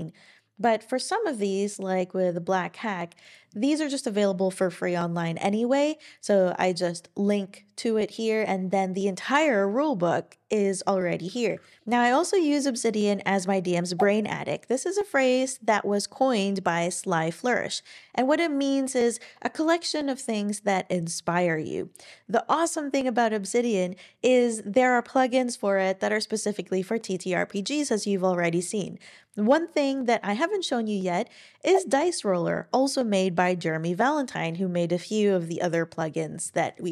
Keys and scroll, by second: 11.5 ctrl+super+r.